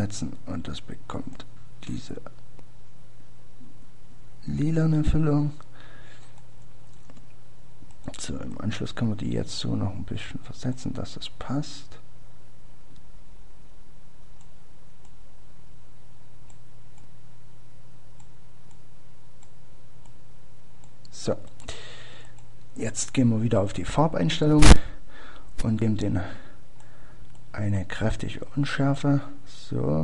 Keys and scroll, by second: 7.6 ctrl+d.